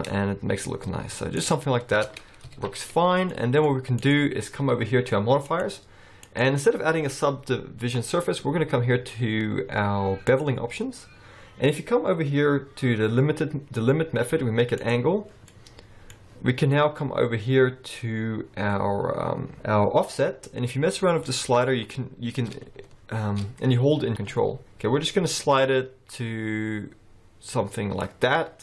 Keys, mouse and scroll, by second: 1.9 Tab, 2.1-2.4 scroll down 5, 2.5 alt+a, 3.1 scroll down 1, 3.3 middle click, 3.6-4.9 scroll up 2, 4.0 click, 5.5 click, 6.3 click, 11.0-14.1 scroll up 4, 14.8 click, 15.5 middle click, 16.3-17.9 scroll up 3, 20.5 click.